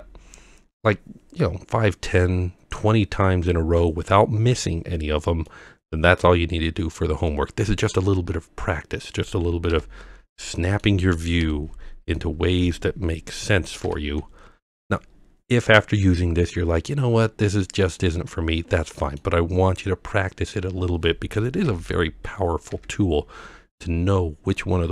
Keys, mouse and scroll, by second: 0.8 scroll down 1, 1.4 scroll down 1, 3.1-3.8 middle drag, 4.7-5.4 scroll down 2, 5.5-7.9 middle drag, 8.3 scroll up 2, 9.7 KP_1, 10.6 middle drag, 11.8 KP_3, 12.2-12.6 middle drag, 13.8 ctrl+KP_7, 15.1-16.9 scroll down 2, 18.0-19.2 middle drag, 20.9 scroll up 1, 21.7 KP_1, 22.3 KP_3, 22.7 KP_7.